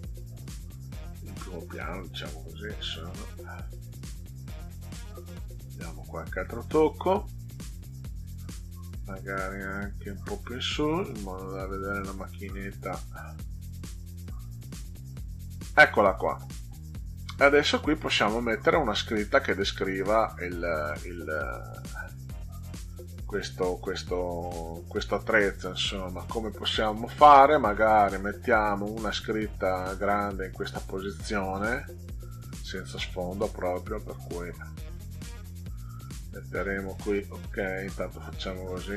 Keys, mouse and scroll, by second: 8.4-12.2 drag, 13.2-14.7 drag, 18.0 middle click, 28.3 scroll up 2, 34.1 click, 35.3 click, 37.5 click.